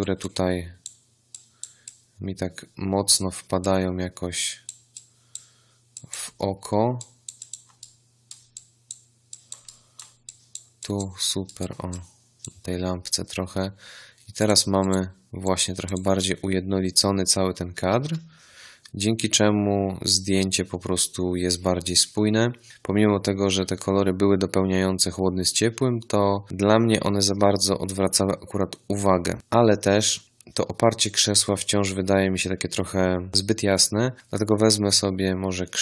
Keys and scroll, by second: 18.0 v.